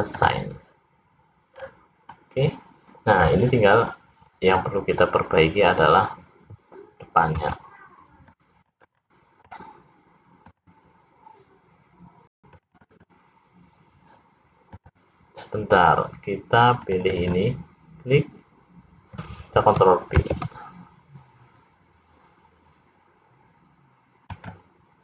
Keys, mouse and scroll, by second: 1.0 click, 1.7-2.2 scroll down 3, 2.4 middle click, 5.2 scroll up 1, 7.6 c, 11.6 click, 12.7 click, 13.4 click, 14.2 click, 15.8 click, 17.6 click, 18.4 click, 20.9 ctrl+b.